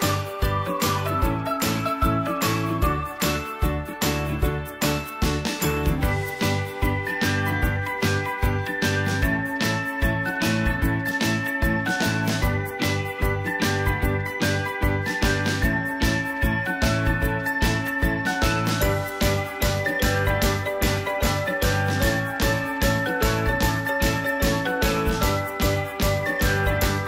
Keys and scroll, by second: 2.5 End.